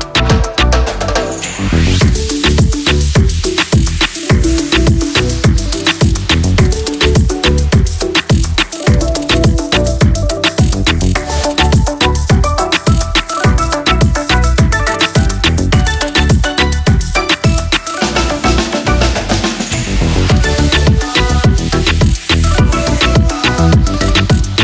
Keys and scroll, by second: 6.7 ctrl+c, 16.9 Down, 17.2 Up, 18.2 ctrl+s, 18.8 ctrl+-.